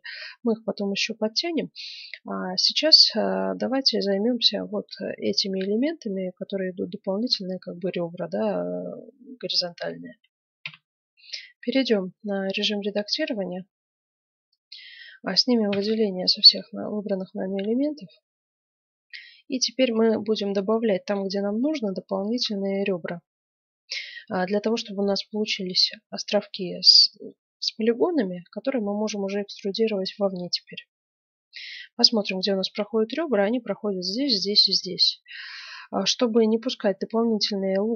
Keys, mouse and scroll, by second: 10.6 F9, 12.3 Tab, 15.6 a, 20.3 click, 20.7-22.7 middle drag, 34.9-37.9 middle drag.